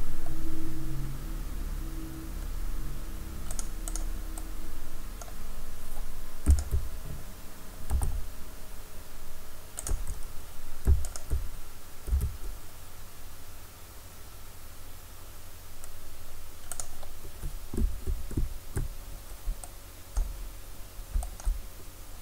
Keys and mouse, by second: 4.1-5.2 drag, 5.2-9.3 right drag, 7.9 s, 9.9-14.7 drag, 12.1 s, 16.8 click, 17.8 KP_1, 18.4 KP_3.